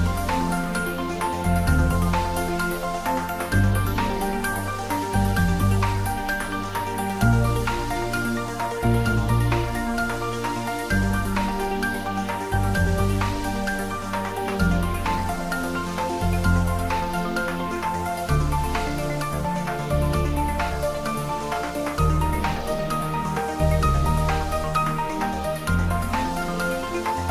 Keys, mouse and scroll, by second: 0.9-3.9 middle drag, 3.9 click, 5.0 scroll up 2, 6.2-7.1 typing, 7.8 Right, 11.7 space, 12.6 scroll down 1, 13.2 middle click, 14.5 scroll down 1, 15.6 middle click, 16.7 scroll down 1, 17.2-18.6 middle drag, 18.6 click, 19.2 scroll down 1, 19.9-22.6 typing, 21.6 click, 23.6 ctrl+z, 24.1 g, 24.9 click, 25.6 3, 26.9 g.